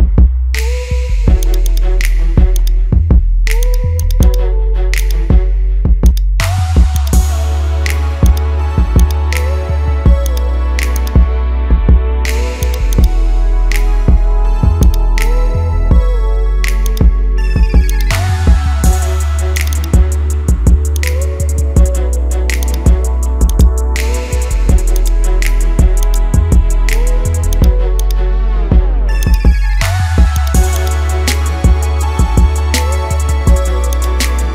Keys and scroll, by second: 13.3 ctrl+1, 22.1 ctrl++.